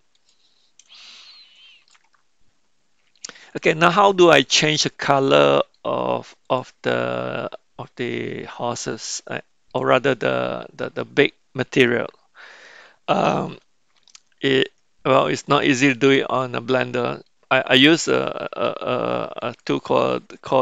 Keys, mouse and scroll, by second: 0.2 click, 1.2-3.3 shift+middle drag, 3.9-5.7 shift+middle drag, 6.4 click, 8.0-8.8 middle drag, 9.2-10.2 shift+middle drag, 10.2-17.3 drag.